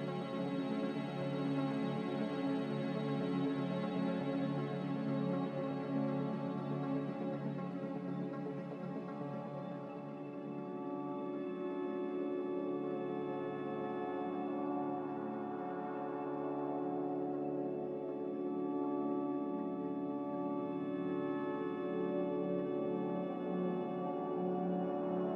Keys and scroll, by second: 19.6 m, 20.9 b, 22.6 m.